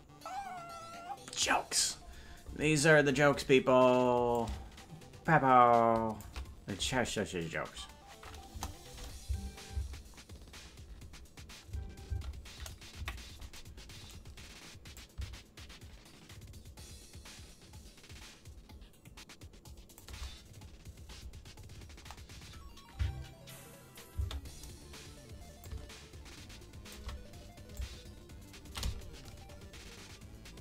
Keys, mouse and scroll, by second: 4.3-6.2 drag, 8.4 KP_0, 9.2 space, 9.7 space, 12.1 space, 12.9 KP_Decimal, 14.9-20.0 drag, 24.1 space, 25.6-26.9 drag, 27.7-30.6 shift+drag.